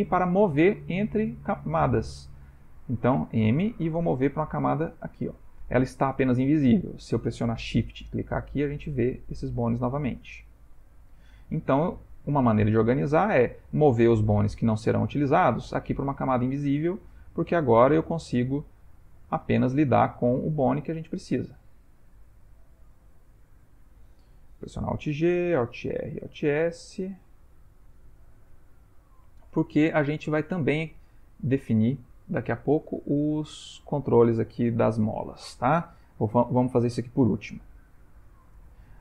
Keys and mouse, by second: 3.1 m, 8.6 shift+click, 9.1 shift+click, 10.5 shift+click, 11.0 shift+click, 17.1 click, 17.6 g, 24.8 alt+g, 25.9 alt+r, 26.2 alt+a, 27.4 click, 28.0 alt+s, 30.1 ctrl+middle click, 30.6 middle click, 36.3 middle click, 36.4 middle click, 38.5 click.